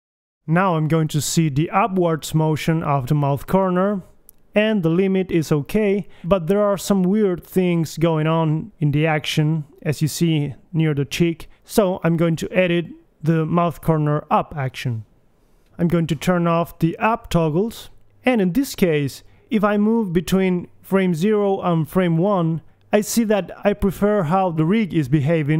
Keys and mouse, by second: 1.7 right click, 2.7 g, 3.5 click, 4.0 middle click, 6.9 middle click, 7.7 alt+g, 8.2 KP_1, 8.5 g, 11.4 middle click, 12.2-13.9 drag, 16.3-17.7 drag, 19.2 click, 19.6 KP_1, 20.3 a, 20.8 a, 21.5 a, 22.1 Left.